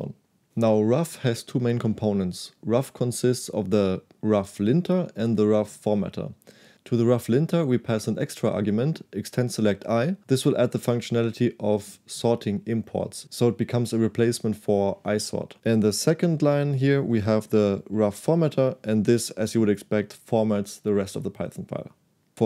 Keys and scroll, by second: 16.2 j.